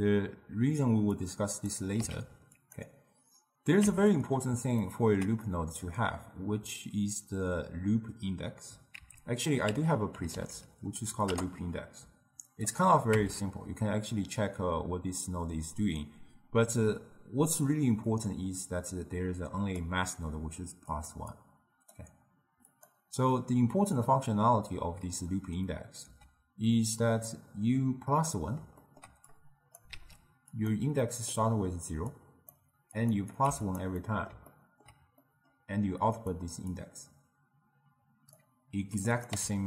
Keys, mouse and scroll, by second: 1.3 click, 2.1 x, 2.6 click, 3.9 Tab, 4.9-8.5 ctrl+middle drag, 9.0 ctrl+a, 10.4 o, 13.1 Tab, 18.1 click, 18.7-21.1 drag, 21.4-25.9 drag, 26.1 x, 28.3-29.4 middle drag, 29.4 click, 30.0 shift+d, 31.1-32.2 middle drag, 32.2 click, 33.0 click, 33.4 click, 34.1-36.8 middle drag, 36.8-39.3 drag, 39.4 n.